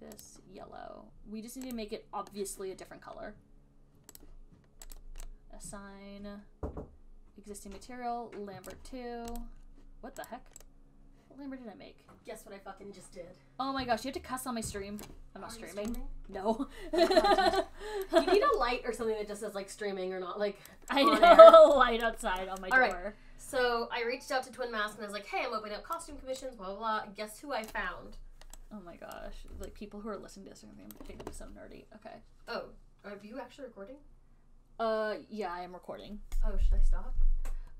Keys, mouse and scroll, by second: 0.5 click, 2.1 click, 4.5 click, 5.3 click, 9.0 right click, 9.7 click, 10.6 click, 15.3 right click, 16.3 click, 18.3 alt+click, 18.7 alt+click, 20.5 alt+click, 20.8 alt+right click, 21.0 alt+right click, 21.5 alt+right click, 21.9 alt+middle click, 22.4 alt+click, 22.8 alt+middle click, 23.3 alt+right click, 26.3 alt+right click, 28.0 right click, 29.6 click, 31.2 alt+click.